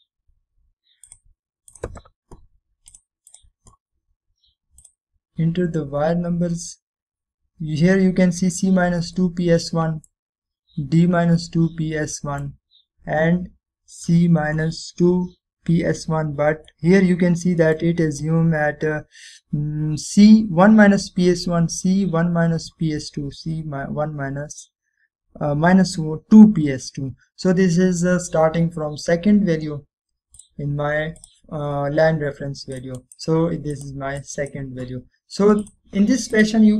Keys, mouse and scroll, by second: 2.2 click, 7.7-9.1 scroll up 1, 9.7-10.3 scroll down 1, 10.3-11.5 middle click, 11.5-12.3 scroll up 1, 12.3-13.1 scroll down 1, 13.1-13.7 middle click, 13.8-14.4 scroll up 1, 18.1-18.9 middle drag, 18.1 typing, 21.0 typing, 28.2-28.6 scroll down 1, 30.1 click, 33.9-34.5 right click, 34.9-35.9 drag.